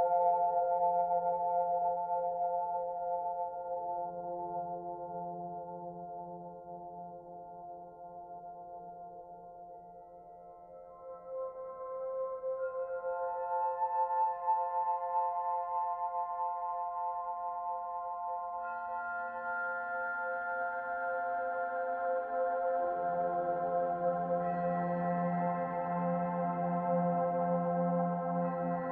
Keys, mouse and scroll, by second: 0.3 click, 1.0 click, 1.6 middle click, 2.3 shift+click, 3.3 click, 4.7 middle click, 5.2 click, 6.8 click, 7.6 shift+click, 8.2 shift+click, 8.8 shift+click, 9.2 middle click, 10.0 click, 11.0 scroll down 2, 13.6 click, 14.1 shift+click, 14.8 click, 17.4 shift+click, 18.1 click, 19.3 middle click, 20.1 click, 20.9 click, 23.8 shift+click, 25.0 click, 26.7 middle click, 27.3 Tab, 27.6-28.9 scroll down 4, 28.0 middle click.